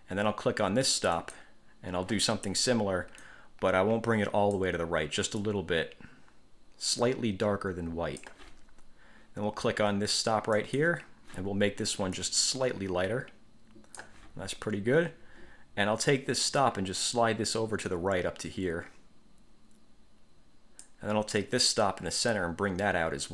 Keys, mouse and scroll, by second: 1.3 click, 3.4-4.9 drag, 5.6 click, 10.7 click, 12.3-14.4 drag, 16.8-21.2 drag, 22.0-23.3 drag.